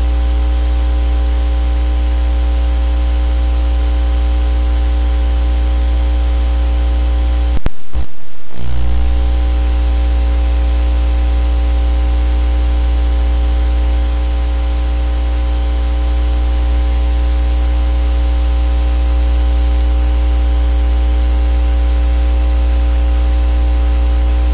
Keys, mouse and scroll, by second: 6.7 click, 9.8 click, 12.6 click, 13.7 click, 14.9 KP_5, 18.1 click, 22.5-24.5 drag.